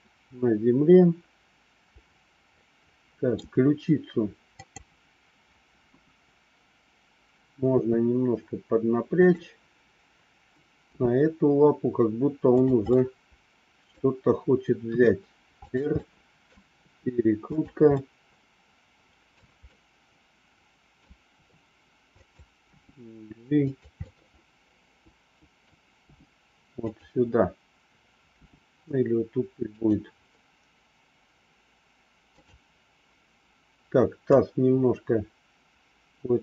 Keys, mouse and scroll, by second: 4.5 click, 5.7 KP_1, 7.7 r, 11.0 g, 13.0 middle click, 13.0 scroll up 1, 14.8 r, 16.0 middle click, 16.8 r, 18.0-19.3 middle drag, 19.6-21.1 middle drag, 21.3 r, 22.7 g, 23.9-25.7 middle drag, 26.1 g, 28.3 g, 32.3 click, 34.3-36.4 drag.